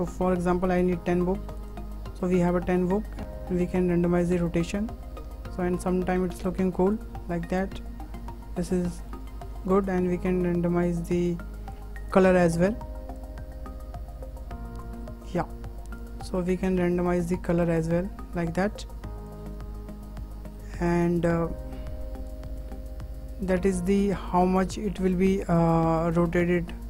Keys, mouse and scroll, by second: 0.5 KP_1, 0.8 KP_0, 3.1 shift+middle click, 3.7 click, 7.6-10.3 middle drag, 10.3 click, 11.7 shift+middle click, 12.1 click, 16.0 click, 20.0-20.4 scroll down 2, 20.4-22.3 middle drag, 22.3 click.